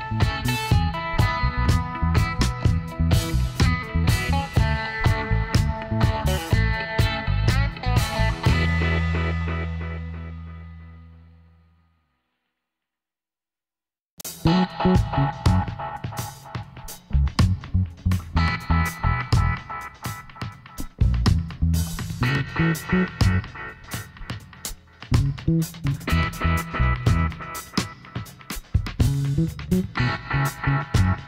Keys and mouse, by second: 1.4-2.8 middle drag, 1.9 Tab, 4.1 n, 5.6 click, 6.1-14.6 middle drag, 14.6-16.7 drag, 16.1 n, 16.7 middle click, 17.0 Tab, 17.1 click, 17.1 right click, 19.0 s, 22.3 click, 24.1-25.4 right drag, 24.6 e.